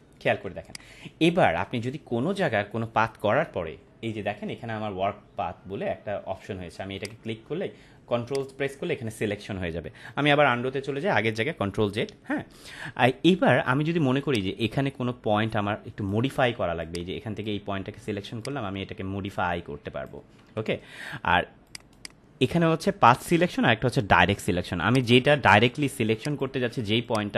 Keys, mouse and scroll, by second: 0.6 click, 0.9-1.2 space, 7.0 click, 14.2-16.0 drag, 21.9 right click, 24.8 click.